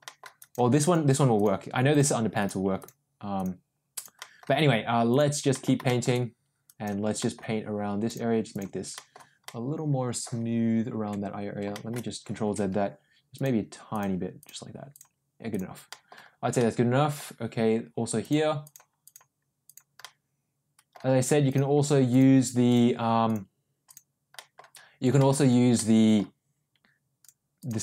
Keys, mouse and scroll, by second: 0.0 middle click, 0.3 click, 0.8 click, 1.3 click, 1.9 click, 2.3 click, 2.7 click, 3.3 click, 3.9 click, 4.1 middle click, 5.0 click, 5.5 middle click, 5.8 shift+middle click, 6.6 click, 7.1 middle click, 8.0 click, 8.5 click, 8.9 middle click, 9.4 middle click, 11.2 ctrl+z, 11.6 shift+middle click, 12.7 ctrl+z, 13.3 click, 13.8 click, 14.3 click, 14.9 click, 15.5 click, 15.8 middle click, 16.5 middle click, 18.2 click, 18.6 click, 19.0 click, 19.6 click, 20.0 middle click, 21.4 click, 22.1 click, 22.6 click, 23.2 click, 23.8 click, 24.3 middle click, 25.1 shift+middle click, 25.7 middle click, 27.1 click, 27.5 click.